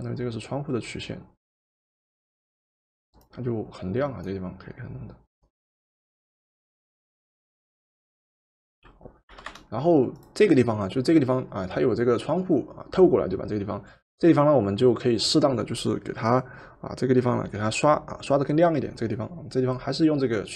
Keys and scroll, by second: 9.4 v.